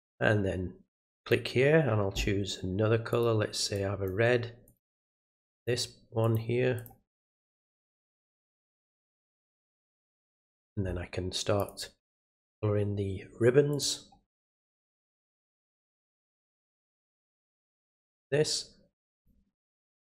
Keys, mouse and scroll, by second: 1.2-3.2 drag, 3.7 click, 4.6 click, 5.5 click, 6.2 click, 6.7 click, 7.4 click, 8.8 click, 9.6 click, 10.2 click, 11.6-13.8 drag, 15.5 click, 17.9 click, 19.1 click.